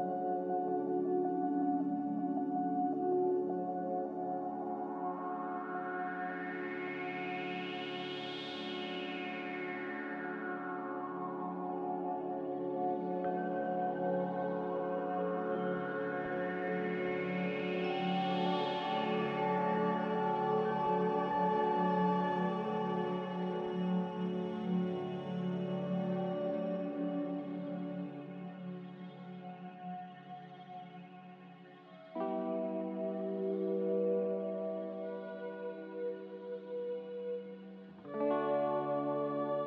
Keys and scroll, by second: 5.7 b, 7.2-8.7 typing, 11.7 a, 13.2 ctrl+c, 15.9 ctrl+v, 25.8 n, 28.4 m, 33.8 n, 36.6 a.